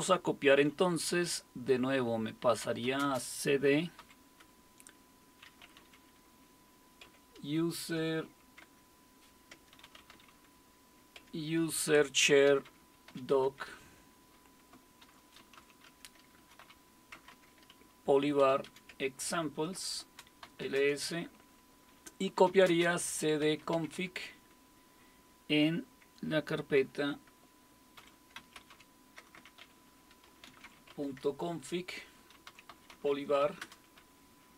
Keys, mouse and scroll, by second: 2.6-4.0 typing, 5.4-8.6 typing, 9.3 click, 9.6-11.2 typing, 12.2-13.6 typing, 14.8-18.9 typing, 20.0-21.1 typing, 22.2-24.2 typing, 26.8-34.5 typing, 33.6 Return.